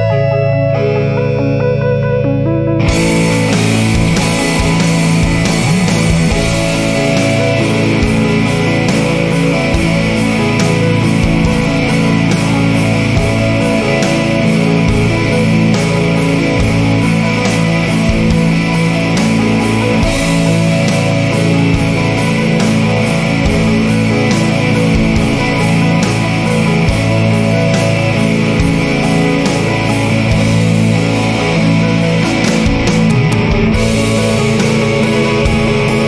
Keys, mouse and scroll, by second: 4.7 click, 6.7 click, 8.5 click, 10.3 click, 14.8 click, 16.5 click, 18.2 click, 19.9 click, 22.2 4, 23.5 0, 26.9 click, 29.2 click, 30.6 1, 32.1 click, 34.4 click.